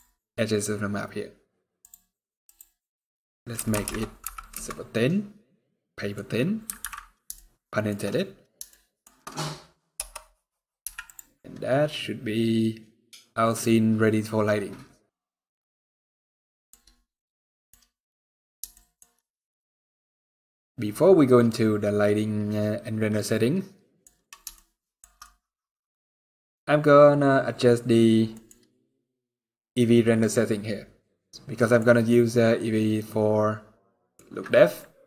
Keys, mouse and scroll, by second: 3.3 click, 3.6 KP_0, 5.6 middle click, 6.1 scroll up 1, 6.3 scroll down 5, 6.7 alt+a, 7.1 shift+middle click, 7.9 scroll down 3, 8.4 shift+middle click, 9.0 scroll up 1, 9.1 scroll down 1, 9.7 KP_0, 10.6 z, 15.7 middle click, 16.9 scroll down 4, 17.2 middle click, 17.4 scroll up 4, 18.4 shift+middle click, 19.1 scroll down 1, 19.2 middle click, 24.2 shift+middle click, 24.9 middle click, 26.5 click, 28.0 middle click, 30.6 scroll up 2, 31.1-31.4 scroll down 3, 31.2 middle click, 31.6-31.9 scroll up 1, 33.6 middle click.